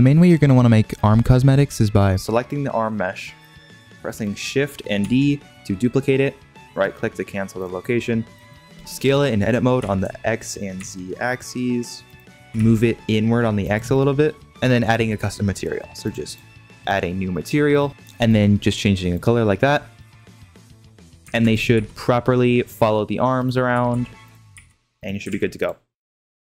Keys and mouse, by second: 0.5-1.2 middle drag, 1.5 shift+middle drag, 1.8 middle drag, 3.2-4.4 middle drag, 5.0 shift+d, 7.5 middle click, 8.3 middle click, 9.7 s, 12.2 ctrl+z, 12.4 g, 13.9 middle click, 16.1 click, 16.9 click, 17.9 drag, 19.6-20.7 middle drag, 20.7 click, 21.3 ctrl+Tab, 21.5 click, 21.7 g, 23.7 r, 24.5 g, 25.2 ctrl+Tab.